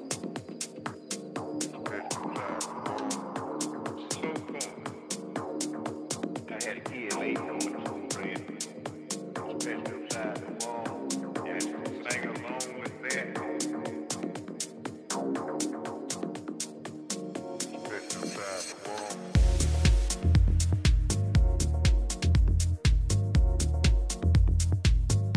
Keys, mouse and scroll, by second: 0.6 g, 5.1 a, 6.6 b, 8.6 e, 12.6 a, 13.2 b, 15.1 g, 17.6 a, 18.9 b, 20.1 e.